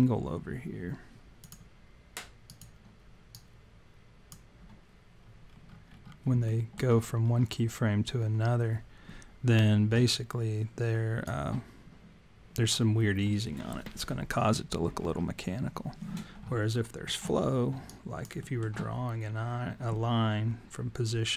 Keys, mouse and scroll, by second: 1.5 click, 2.5 click, 3.4 click, 5.5-6.1 scroll up 8, 6.5 alt+middle click, 7.2 scroll up 2, 10.1 alt+click, 15.0-15.7 scroll up 6, 16.8 alt+middle click, 17.5-18.4 scroll down 3, 17.9 alt+click, 18.4 alt+middle click.